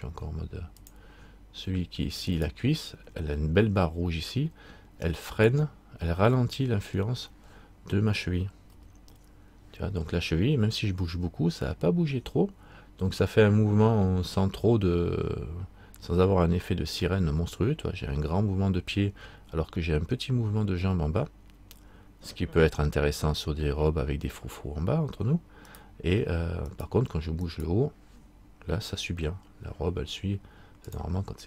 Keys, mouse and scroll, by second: 1.0 click, 2.5 right click, 6.5 right click, 6.6 middle click, 8.9 r, 26.9 right click, 29.0 r.